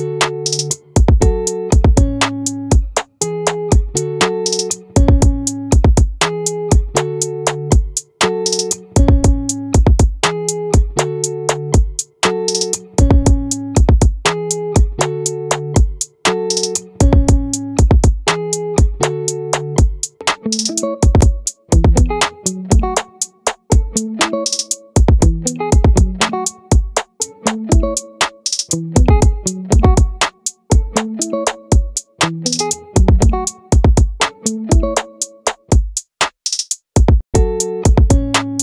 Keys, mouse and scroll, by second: 7.8-9.6 drag, 10.4-12.8 right drag, 12.8-14.4 middle drag, 14.4 right click, 15.8-17.8 right drag, 17.8-19.1 drag, 20.7 ctrl+z, 21.9-23.3 right drag, 23.7 click, 23.9 right click, 24.4 click, 31.9 ctrl+r, 35.3-36.4 right drag.